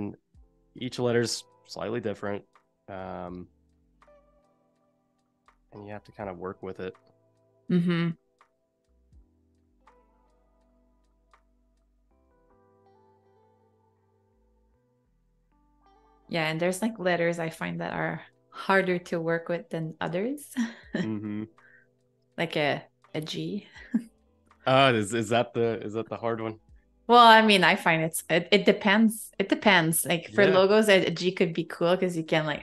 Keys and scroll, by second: 0.7 Delete, 2.3 4, 7.8 i, 8.7 a, 10.9 super+], 13.0 space, 24.1 i, 25.6 a, 26.1 space.